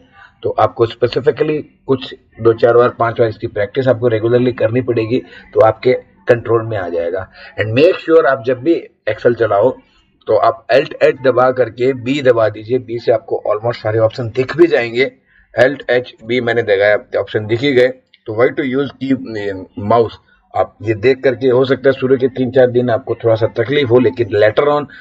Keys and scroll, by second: 15.8 alt+h, 16.2 alt+b.